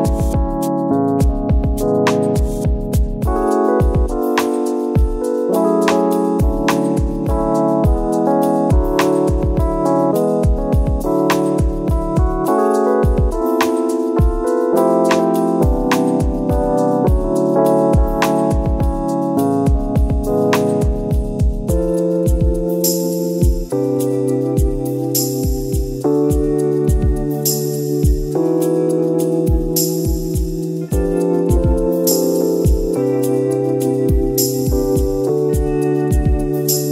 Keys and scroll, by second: 1.7 ctrl+d, 5.2 ctrl+d, 6.1 ctrl+d, 6.2 ctrl+-, 6.5 Delete, 7.3 ctrl+e, 7.4 ctrl+z, 8.1 ctrl+e, 8.5 ctrl+-, 8.6 ctrl++, 9.3 ctrl++, 9.5 ctrl++, 14.6 ctrl+z, 24.2 ctrl+-, 24.4 ctrl+-, 26.8 ctrl+e, 27.1 ctrl+z, 27.3 ctrl+e, 27.8 ctrl++, 30.5 space.